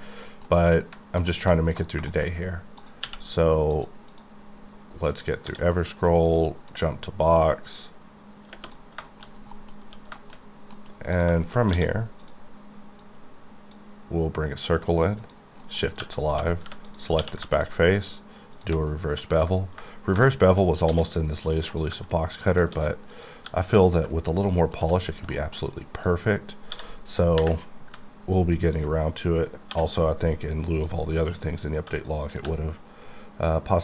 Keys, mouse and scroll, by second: 0.5 middle click, 1.4 middle click, 2.1 shift+middle click, 2.3 shift+scroll down 1, 2.4-2.8 scroll up 2, 3.0 q, 3.7 q, 3.7 click, 3.8 click, 4.1 click, 4.4-5.4 scroll up 4, 5.4 d, 6.3 click, 6.7 click, 9.1 shift+middle click, 9.2 shift+scroll down 2, 9.5 middle click, 9.8 1, 10.1-10.5 scroll down 2, 10.2 shift+middle click, 10.9 middle click, 11.3 shift+click, 11.4 shift+middle click, 11.7 d, 12.2 click, 15.2 shift+click, 15.6 shift+middle click, 16.3-17.2 typing, 16.9 click, 17.5 ctrl+click, 18.9 middle click, 20.9 s, 21.7 click, 21.9 g, 22.5 click, 22.7 s, 23.1 click, 23.4 g, 23.9 click, 24.3 scroll down 4, 24.5 middle click, 24.8 1, 25.3 middle click, 25.7 scroll up 2, 26.1 click, 26.2 click, 26.5 scroll up 3, 26.7 d, 28.8 ctrl+click, 29.7 j, 32.4 b.